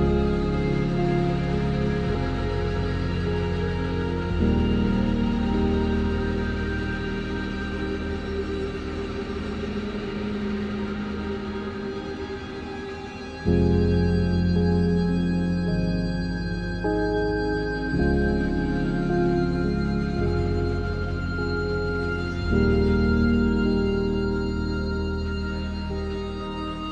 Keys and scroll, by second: 2.5 e, 3.2 ctrl+z, 3.6 e, 6.2 shift+x, 7.6 ctrl+z.